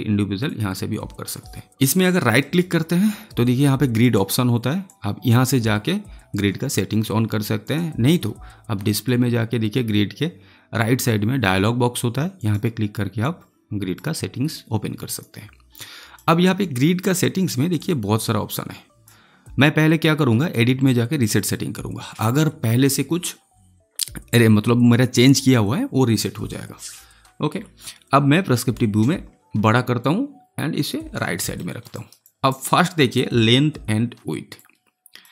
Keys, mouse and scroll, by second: 2.3 right click, 3.9 click, 12.3-20.3 drag, 28.4 middle click, 28.8 space, 29.9 click, 31.1 alt+right click, 31.5 alt+middle click, 31.9 alt+right click, 32.2 alt+click, 34.5-35.3 drag.